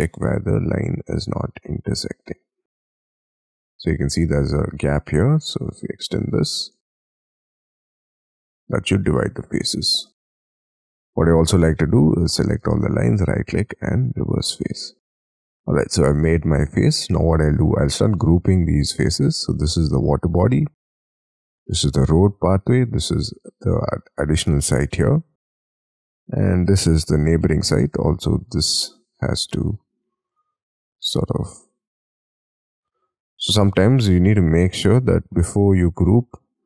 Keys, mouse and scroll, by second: 2.7-3.3 scroll up 13, 3.8-4.4 scroll up 11, 4.4 Escape, 6.6 shift+click, 7.0 space, 7.4 scroll down 6, 7.7 e, 8.2 space, 8.6 double click, 8.9-10.9 scroll down 47, 10.9-11.4 scroll up 5, 11.4 double click, 11.5 double click, 12.5 right click, 14.4 middle click, 15.6 space, 16.1-16.8 scroll down 5, 16.8-17.9 scroll up 10, 17.9-18.8 scroll down 11, 18.9 scroll up 2, 19.3 double click, 20.1 g, 21.1-21.6 scroll up 4, 21.9 g, 22.8 double click, 23.1-24.7 scroll down 5, 24.7 g, 25.1-25.6 scroll up 4, 25.6 double click, 26.0 middle click, 27.0-27.7 scroll up 5, 28.0 scroll down 5, 28.2-30.6 scroll up 18, 30.6-31.6 scroll up 13, 31.6-32.2 scroll up 5, 32.2 double click, 32.7-33.2 scroll down 5, 33.2 scroll up 1, 33.3-33.9 scroll down 13, 34.3-34.8 scroll up 5, 34.9-35.5 scroll down 14, 35.8-36.6 scroll up 30.